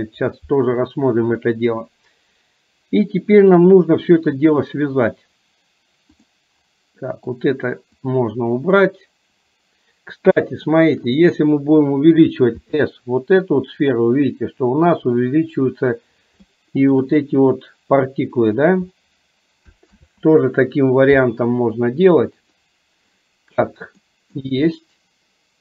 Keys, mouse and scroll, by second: 6.2 click, 7.1 middle click, 8.1-8.7 drag, 10.5-11.1 shift+middle drag, 12.7 s, 16.6 shift+middle click, 20.0 ctrl+z, 22.7 click, 24.1-24.5 shift+middle drag.